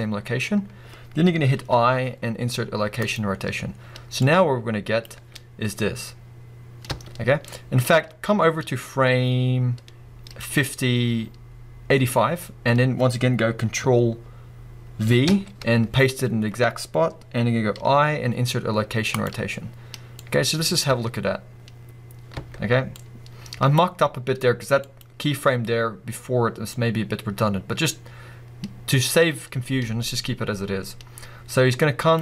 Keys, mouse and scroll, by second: 5.1 space, 5.3 space, 12.9-15.3 scroll up 2, 15.3 ctrl+v, 20.2-25.0 drag, 20.9 space, 26.7-32.2 drag.